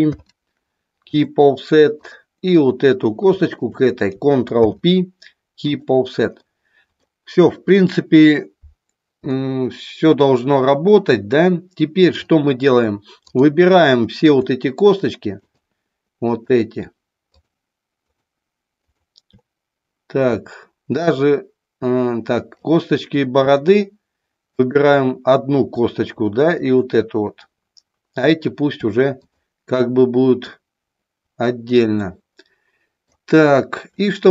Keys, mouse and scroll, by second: 0.1 ctrl+p, 2.1 click, 3.5 shift+click, 4.6 ctrl+p, 6.5 middle click, 9.3-12.2 middle drag, 13.3 click, 15.3 shift+click, 16.3 shift+click, 17.3-18.7 shift+drag, 18.8 shift+click, 21.1-22.7 shift+drag, 24.6 shift+click, 26.5-27.7 shift+drag, 32.0-33.1 middle drag, 34.1 shift+middle click.